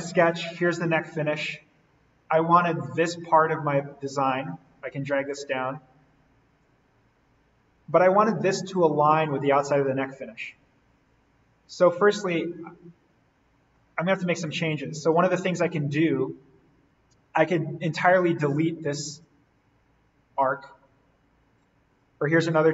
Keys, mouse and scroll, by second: 2.9-3.5 scroll up 1, 5.2 click, 7.0-7.5 scroll down 1, 7.9-9.7 scroll down 1, 11.3-12.3 scroll down 1, 14.0-15.9 scroll down 1, 16.1 click, 17.0-17.3 scroll up 1, 20.9-22.2 scroll down 1, 22.2 Escape.